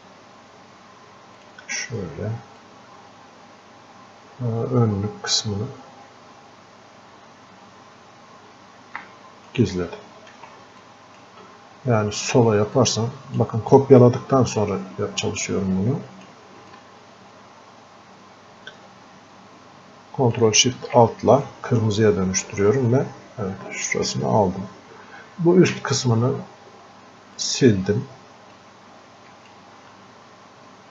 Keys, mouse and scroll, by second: 10.9-14.5 drag, 14.5 scroll up 1, 15.8 click, 16.7-21.5 ctrl+alt+shift+drag, 21.5-30.9 drag.